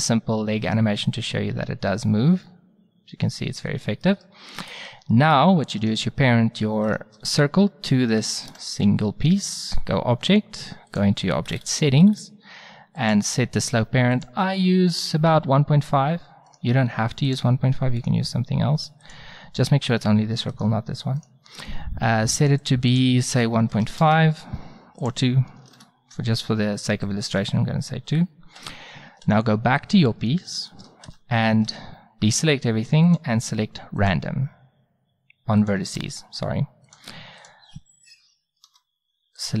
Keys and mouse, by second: 4.1-5.8 middle drag, 8.5 ctrl+p, 10.9-12.7 drag, 12.9 middle click, 13.0-16.1 drag, 17.3 click, 18.0-19.8 middle drag, 19.8-20.5 drag, 20.5 middle click, 22.6-24.9 drag, 25.0-26.9 drag, 27.0-28.8 drag, 29.3 right click, 31.1 Tab, 31.7 a, 34.1 click, 35.6-36.9 drag, 36.0 a, 37.6-38.3 drag, 38.7 a.